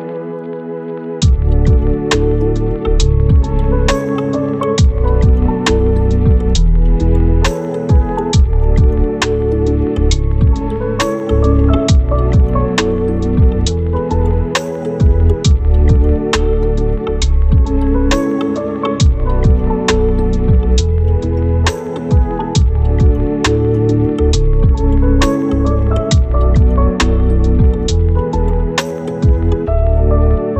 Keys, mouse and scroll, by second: 0.6 right click, 1.2 scroll up 1, 1.4 right click, 3.6 click, 4.1-8.7 right drag, 8.8 scroll up 1, 9.1 right click, 10.3 click, 11.0 right click, 11.8 click, 12.0 scroll down 1, 12.1 scroll up 1, 12.4 right click, 13.5 scroll up 1, 13.6 right click, 14.5-15.1 scroll down 2, 14.6 right click, 15.1 scroll up 1, 15.4 click, 15.6-16.0 scroll down 1, 16.0 click, 17.2 scroll down 1, 17.3 scroll up 1, 17.4 right click, 17.8 click, 18.2-20.8 scroll up 2, 18.3 right click, 20.8 click, 26.7 scroll down 1, 26.8 scroll up 1, 26.9 right click, 27.4-27.7 scroll up 1, 27.7 right click, 28.1 scroll down 1, 28.3 scroll up 1, 28.4 right click, 28.9 scroll down 1, 29.1 scroll up 1, 29.2 right click, 30.2 click.